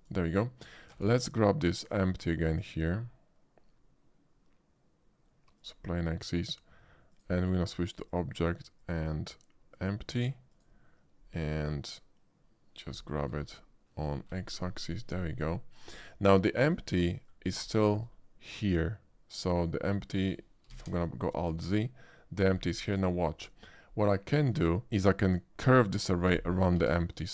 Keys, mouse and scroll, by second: 0.9 shift+a, 5.6 click, 7.1 click, 8.0 click, 8.8 click, 9.7 click, 10.5 click, 13.3 g, 14.3 x, 15.7 click, 16.5 shift+middle click, 17.0 shift+middle drag, 17.8 shift+middle click, 20.7 alt+z, 22.8-23.2 middle drag, 23.4 shift+middle click, 26.8 alt+z.